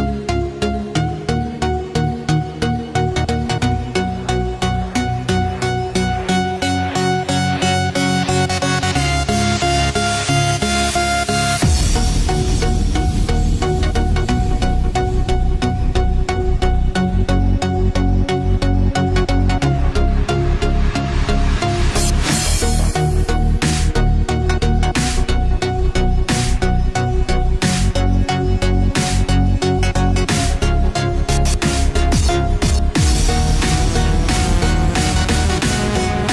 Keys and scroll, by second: 2.0 F5, 11.8 ctrl+s, 22.6-25.5 typing, 26.1 ctrl+s, 35.9 ctrl+c, 36.0 ctrl+v.